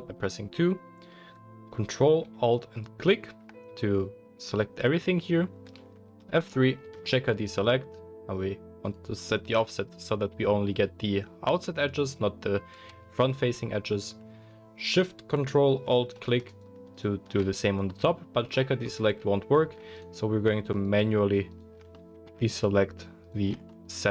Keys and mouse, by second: 2.7 ctrl+alt+click, 3.4-8.9 ctrl+middle drag, 6.2 F3, 8.9-24.1 drag, 16.4 ctrl+alt+shift+middle click, 16.4 ctrl+alt+shift+right click, 16.9 ctrl+alt+shift+middle click, 16.9 ctrl+alt+shift+right click, 20.7 shift+middle click, 20.7 shift+right click, 21.4 shift+middle click, 21.4 shift+right click, 22.5 shift+middle click, 22.5 shift+right click, 23.2 shift+middle click, 23.2 shift+right click.